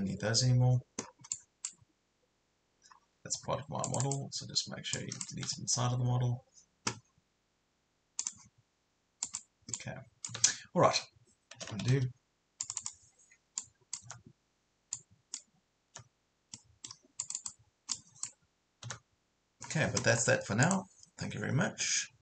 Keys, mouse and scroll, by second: 1.0-1.3 scroll down 1, 1.3-2.5 drag, 2.9 scroll up 1, 3.2 Escape, 3.9 click, 5.5 Delete, 8.2 click, 10.3 Delete, 11.9 ctrl+z, 12.6 click, 14.1 Delete, 14.9 click, 15.9 Delete, 16.5 middle click, 17.2 click, 18.9 Delete, 20.7 click.